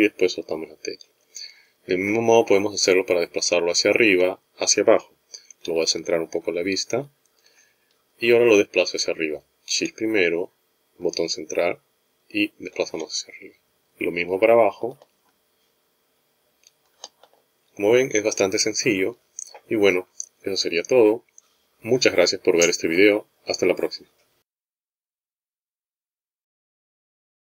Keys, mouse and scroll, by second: 6.4 shift+middle click, 11.4 shift+middle click, 15.3 shift+middle click.